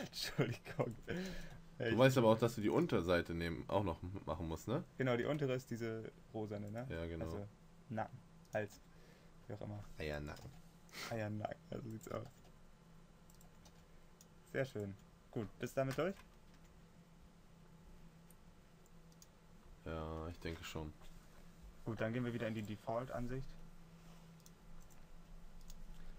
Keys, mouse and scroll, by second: 1.7 s, 3.3 g, 9.2 s, 10.8 g, 12.7 s, 14.0 g, 16.9 Tab.